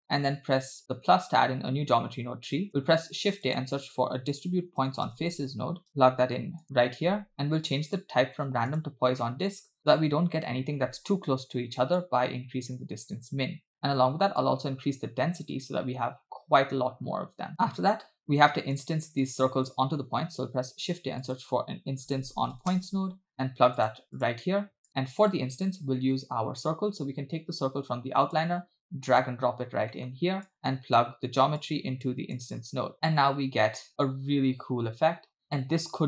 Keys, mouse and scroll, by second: 0.6 click, 2.1-2.9 scroll up 4, 2.9 shift+a, 7.3-7.9 scroll up 2, 7.9-8.9 drag, 12.0-13.7 shift+drag, 14.4-17.5 shift+drag, 18.3-18.8 drag, 19.2-19.8 drag, 20.5 shift+a, 24.9-25.3 drag, 28.3 click, 29.7 scroll down 2, 30.0 middle drag, 30.5-31.0 drag, 31.6-32.4 drag, 33.2 space, 33.9 scroll up 3.